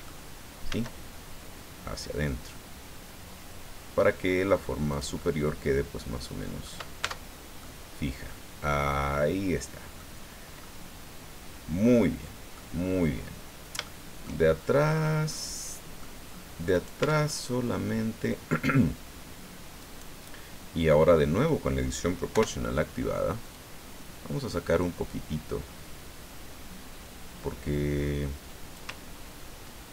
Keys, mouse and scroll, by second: 0.7 s, 4.9 click, 5.2-6.8 middle drag, 7.0 Tab, 7.3 scroll down 1, 7.6-9.8 middle drag, 9.8 click, 10.1 scroll down 1, 10.6-12.7 drag, 13.2-13.6 scroll up 1, 13.8 shift+click, 14.6-15.1 shift+scroll up 1, 15.3 click, 16.3-16.6 scroll up 1, 16.7 right click, 17.0 Tab, 17.3 click, 17.7 middle click, 19.8 right click, 20.3-21.6 middle drag, 22.3 o, 23.5 click, 24.5-24.9 scroll up 1.